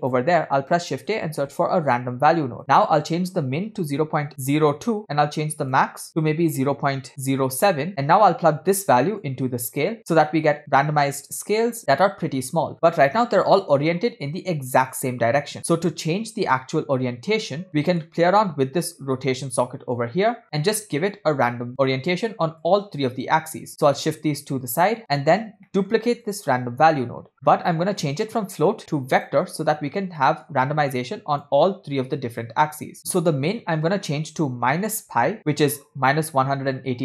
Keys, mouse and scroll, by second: 2.9-5.0 drag, 5.7-7.9 drag, 9.2-10.2 drag, 10.8-11.8 middle drag, 12.7 scroll down 4, 13.0-15.1 middle drag, 16.0-16.6 scroll down 1, 16.6 scroll down 1, 16.7 click, 17.7-20.4 scroll up 4, 17.8 middle click, 20.4 scroll up 2, 20.4-21.1 scroll down 4, 21.7-22.4 drag, 22.6-23.7 drag, 23.8-25.3 drag, 25.4-26.4 scroll up 3, 25.8 middle click, 26.4 click, 27.1 shift+d, 27.5-28.2 scroll up 3, 28.2-29.5 drag, 30.3 scroll down 2, 30.3 middle click, 31.6-33.0 drag, 33.0 middle click, 33.0 scroll up 2, 33.6-33.9 scroll up 2, 33.9-37.0 shift+drag.